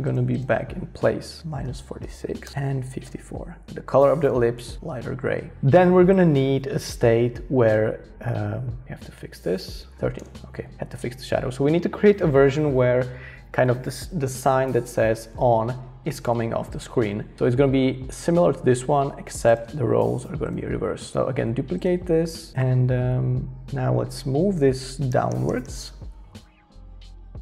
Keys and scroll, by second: 1.4-4.4 typing, 21.1 Return, 25.1 shift+Down, 25.3 shift+Down, 25.5 shift+Down, 25.6 shift+Down.